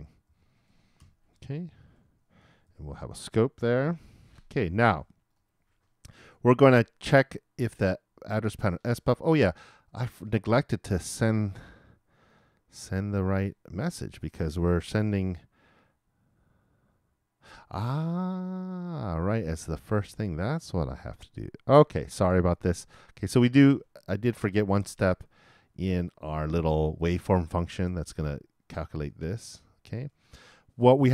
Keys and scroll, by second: 1.1-2.4 typing, 2.6 shift+Return, 3.2 shift+Return, 3.7 shift+].